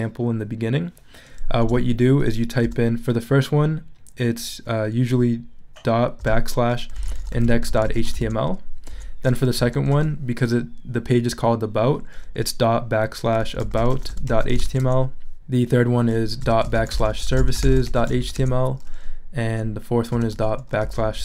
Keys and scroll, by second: 1.6 BackSpace, 2.6 ., 6.2-9.9 typing, 8.9 Tab, 13.2-15.1 typing, 16.2-18.6 typing, 19.9-21.2 typing.